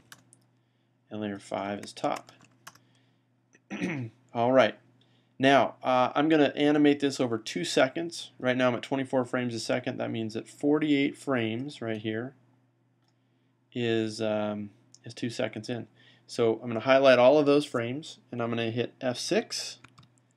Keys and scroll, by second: 0.0-0.4 typing, 1.7-2.8 typing, 19.8 F6.